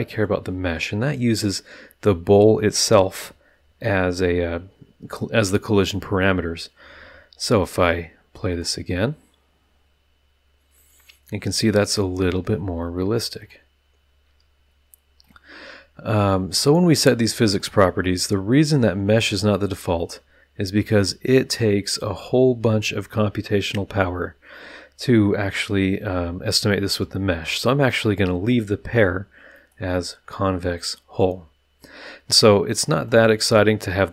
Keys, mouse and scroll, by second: 0.1 click, 8.5 click, 13.4 click, 15.2 click, 17.0 click, 17.6 click, 20.0 click, 26.9 click, 29.5-29.9 drag, 29.9-31.4 middle drag, 32.9 click.